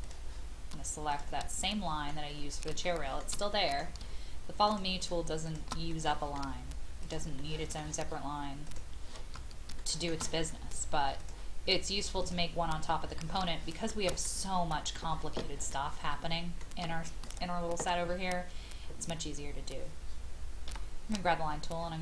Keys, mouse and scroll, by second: 1.1 shift+click, 1.7 middle click, 2.1-2.6 scroll down 1, 2.9 shift+middle click, 3.5 middle click, 4.6 shift+click, 5.4 shift+click, 5.9 middle click, 7.0 shift+click, 7.4 shift+middle click, 8.6 shift+click, 9.8 shift+middle click, 11.2 click, 12.6-13.4 scroll down 1, 14.2 middle click, 15.7 shift+middle click, 21.4-21.8 scroll up 1.